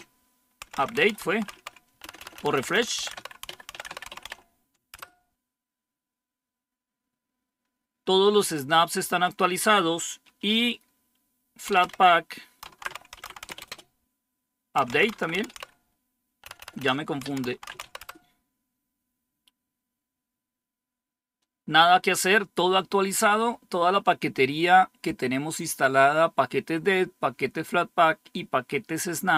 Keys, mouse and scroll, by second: 0.0-4.7 typing, 4.9 Return, 11.4-18.2 typing.